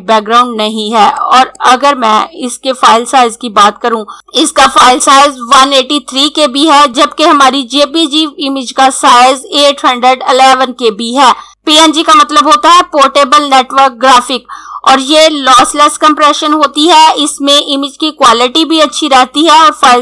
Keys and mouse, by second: 0.3 click.